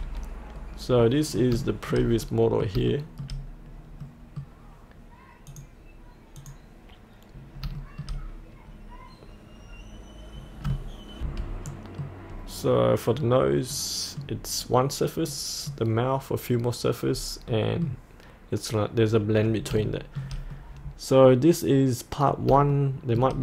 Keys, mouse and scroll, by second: 0.5-1.1 scroll down 1, 1.1 middle click, 1.7 shift+middle click, 2.7 middle click, 4.1 middle click, 5.5 click, 7.9 shift+middle click, 9.8 shift+middle click, 11.2 F8, 11.7 middle click, 12.3 scroll down 1, 13.8 middle click, 17.2-17.6 scroll up 1, 17.6-18.8 middle drag, 19.9 shift+middle click, 20.7-22.5 middle drag, 22.7 shift+middle click.